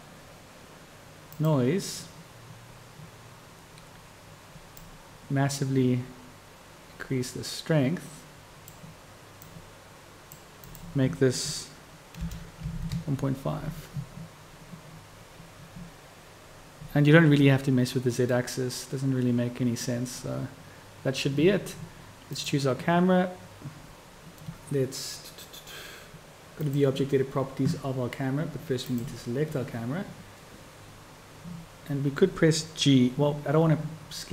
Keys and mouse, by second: 18.7-29.3 drag, 29.3-34.3 middle drag.